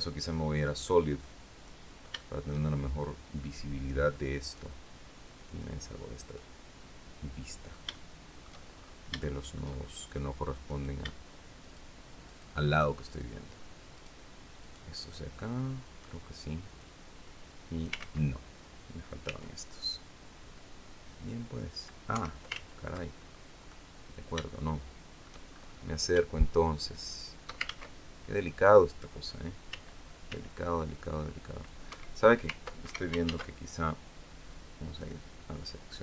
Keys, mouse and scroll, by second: 0.0 click, 1.0 click, 1.7 shift+middle click, 3.9 click, 4.8 click, 5.8-6.8 middle drag, 6.8 scroll up 2, 7.4 shift+middle click, 8.2-8.6 shift+scroll up 3, 8.7 shift+middle click, 10.1 right click, 11.1 shift+right click, 11.7 shift+right click, 12.2 shift+right click, 12.5 shift+right click, 13.4 shift+right click, 14.1 shift+right click, 16.2-17.5 drag, 17.5 ctrl+z, 18.7 c, 20.7 click, 21.6 Escape, 22.7-23.0 ctrl+scroll up 3, 23.2 click, 23.8 shift+right click, 25.0-25.6 shift+scroll up 3, 26.4 shift+right click, 27.1 ctrl+shift+z, 29.2 c, 30.5 click, 31.3 Escape, 32.3 ctrl+Escape, 32.7 ctrl+z, 34.4 click, 35.7-36.0 scroll down 2.